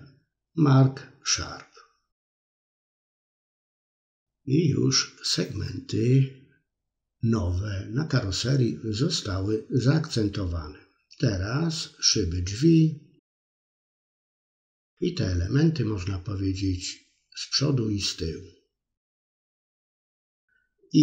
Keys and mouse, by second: 0.0 middle click, 0.5 middle click, 1.3 Tab, 1.8-2.4 middle drag, 2.5 middle click, 2.7-3.9 middle drag, 4.2 Tab, 4.8 middle click, 5.1-7.7 drag, 7.9-8.9 shift+drag, 8.9 middle click, 9.8 shift+click, 10.7 middle click, 11.0 shift+click, 11.5 middle click, 12.5 shift+click, 12.8-14.1 middle drag, 15.0-16.2 drag, 16.8-18.1 drag, 18.4-19.5 middle drag, 19.7 middle click, 20.0 middle click.